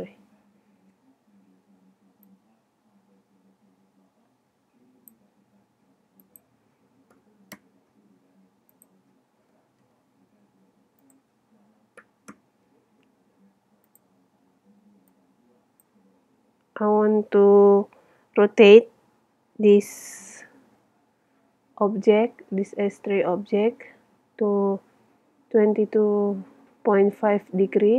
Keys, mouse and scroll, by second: 0.0 KP_0, 1.0 n, 6.3-8.0 drag, 8.8-10.4 drag, 11.1-12.7 drag, 14.0-16.8 drag, 16.8-19.4 middle drag.